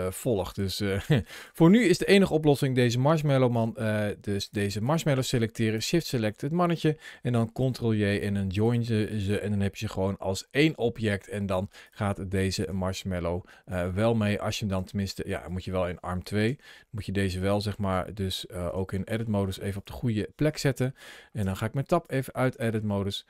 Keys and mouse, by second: 0.3 click, 0.8 middle click, 1.7 click, 4.3 click, 6.3 middle click, 7.4 ctrl+j, 12.4 click, 13.5-14.6 drag, 15.1 click, 16.3 Tab, 17.8 g, 18.5 click, 18.9 middle click, 19.2 g, 19.6 click, 19.9 middle click, 21.2 Tab, 22.6 middle click.